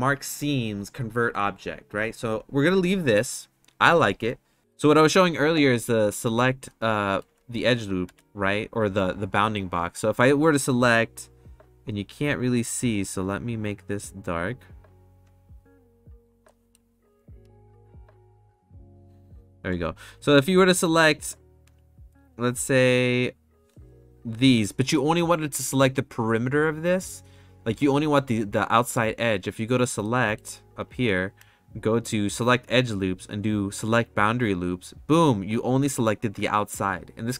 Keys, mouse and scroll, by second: 6.6 shift+middle click, 8.0 3, 13.3 click, 14.3-15.5 drag, 16.5 middle click, 18.0 click, 18.5 click, 20.1 shift+click, 21.1 shift+click, 22.7 shift+click, 30.2 middle click, 30.9-34.6 drag.